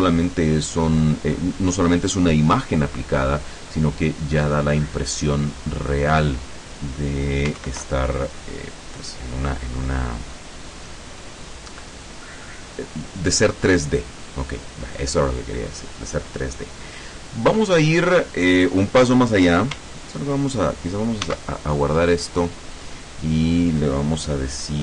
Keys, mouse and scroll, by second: 7.7 ctrl+Right, 11.0-11.8 scroll up 4, 12.2 scroll down 2, 21.4 ctrl+s, 22.4 click.